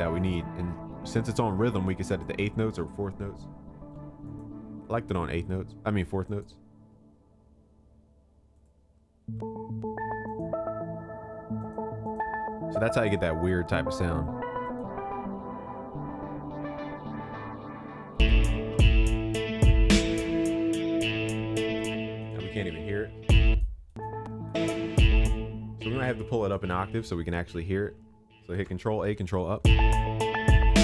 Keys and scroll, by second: 28.5 ctrl+a, 29.1 ctrl+Up.